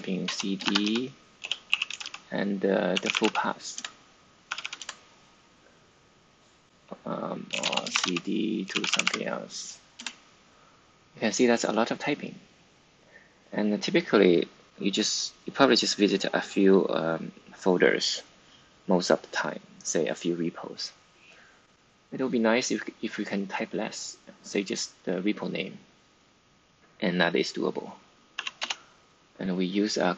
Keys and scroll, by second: 0.0-4.9 typing, 3.6 Return, 6.4-9.3 typing, 9.9 Return, 28.3 typing.